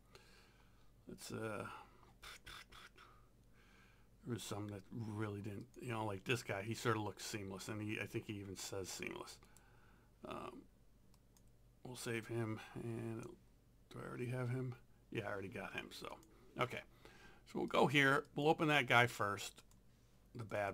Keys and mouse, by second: 5.7 click, 9.5 right click, 11.2 click, 16.1 click, 17.7 click.